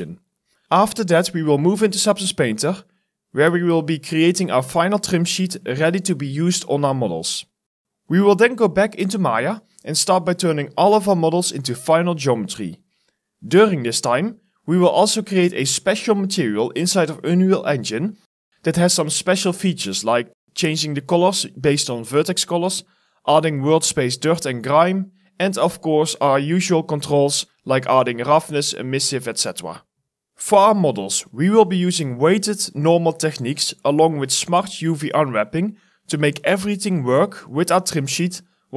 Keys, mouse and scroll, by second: 30.2 alt+middle click, 31.0 Return, 31.4 alt+middle click, 31.5 alt+scroll down 1, 32.1 alt+middle click, 33.5 shift+click, 34.8 Return, 35.9 alt+middle click, 36.3 scroll down 1, 36.4 alt+middle click, 36.5 scroll up 1, 36.6 alt+click, 36.8 alt+middle click, 37.9 Return.